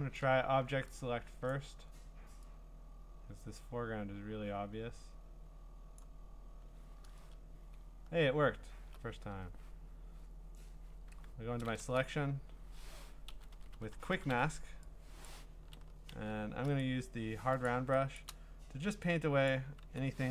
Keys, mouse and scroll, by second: 1.5 click, 2.3 click, 6.0 click, 8.1-8.6 scroll, 11.1 q, 11.6 scroll, 12.1 typing, 13.1-14.8 typing, 15.3 click, 16.1 ctrl+z, 16.8 right click, 17.7 click, 18.2 click, 19.5 click, 19.8 ctrl+z.